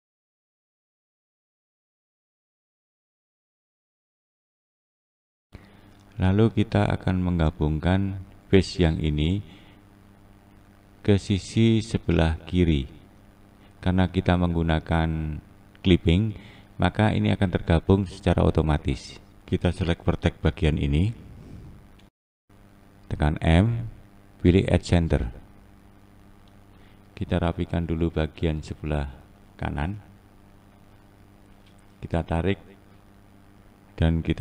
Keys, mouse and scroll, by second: 0.0 click, 0.3 scroll down 3, 0.5 click, 0.6 click, 0.9 click, 1.2 click, 1.4 click, 1.7-2.4 scroll down 4, 2.0 shift+middle click, 2.2 scroll up 2, 2.4 click, 2.5 click, 3.0 click, 3.2 click, 3.6 click, 3.7 click, 4.1 click, 4.7 click, 7.3 2, 8.6 click, 10.2 e, 12.4-12.8 scroll up 1, 16.7 1, 17.4 click, 18.8 click, 19.5-20.3 scroll up 2, 20.3 scroll up 1, 20.4 click, 22.3 shift+click, 24.5 m, 25.0-25.9 scroll down 2, 25.9 click, 26.9-27.2 scroll up 2, 28.1 click, 28.6-29.6 scroll up 2, 29.6-30.6 scroll up 5, 30.6-31.5 scroll down 2, 32.0-32.6 shift+middle drag, 32.6 shift+scroll down 1, 32.7 scroll up 1, 33.7 click.